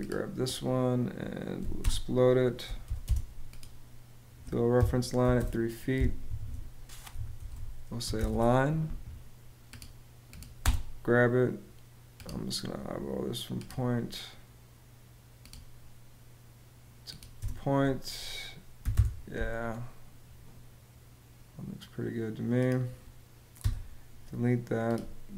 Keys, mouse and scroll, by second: 1.3 x, 1.5 space, 2.5 p, 2.7 space, 4.4 3, 4.9 ', 5.0 Return, 6.0 Escape, 6.6-8.3 typing, 10.3 space, 17.1 space, 18.5 y, 18.6 Home, 23.3 BackSpace.